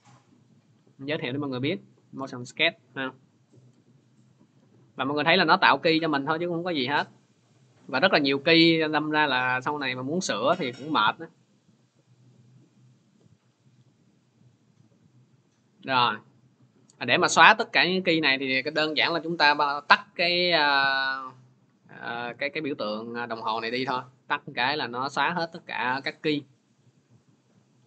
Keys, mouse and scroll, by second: 4.4 click, 6.0 click, 6.3 click, 7.1 click, 7.4 click, 8.6 click, 9.0 click, 10.3 click, 10.7 click, 11.8 click, 12.8 click, 14.7 click, 15.2 click, 23.4 click, 24.9 click, 26.2 scroll.